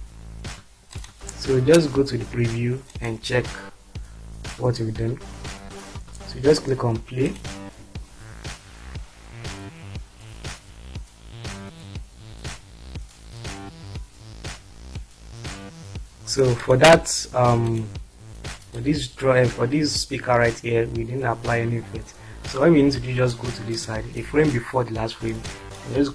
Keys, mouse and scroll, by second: 0.9 click, 2.9 click, 7.2 click, 16.7 click, 18.8-19.7 drag, 20.5-23.2 drag, 25.4 click.